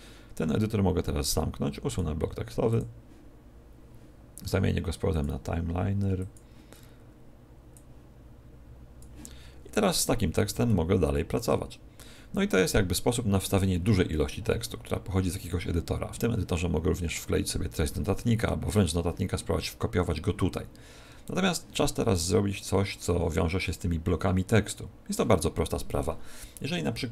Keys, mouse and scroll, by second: 5.0 click, 7.6 click, 9.7-10.1 scroll up 2, 10.2-10.6 scroll down 1, 10.6 shift+middle click, 27.0 right click.